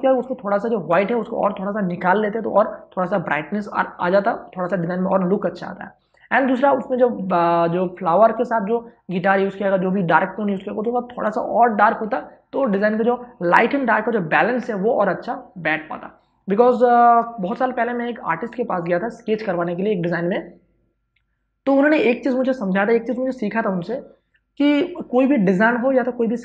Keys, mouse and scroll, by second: 6.5 space, 6.7 ctrl+click.